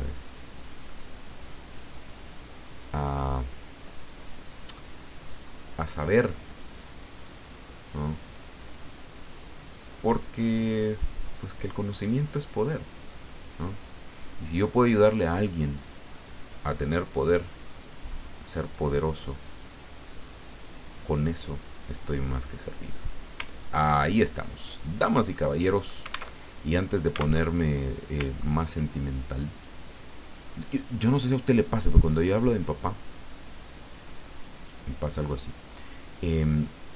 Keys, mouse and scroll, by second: 0.1 click, 1.9 click, 6.7 click, 7.5 click, 8.2 click, 9.6 click, 13.0 click, 16.1 click, 17.8-21.0 drag, 21.9-23.3 drag, 23.5-24.1 ctrl+scroll down 4, 25.3 middle click, 26.3 alt+Tab, 27.3 alt+Tab, 28.3 ctrl+scroll up 2, 29.5 click, 30.7 click, 31.2 click, 32.0 click, 33.9 click, 35.2-36.8 drag.